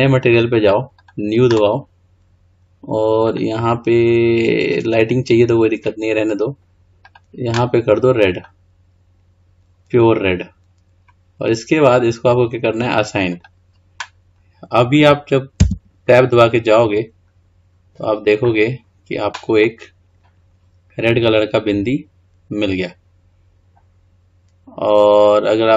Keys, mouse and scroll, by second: 7.2 drag, 13.4-14.5 drag, 14.5-15.7 scroll down 3, 15.7 Tab, 16.7-17.4 scroll down 2, 17.4-17.8 scroll up 2, 17.8-19.0 scroll down 2, 19.0-19.8 scroll up 3, 19.8-22.8 middle drag.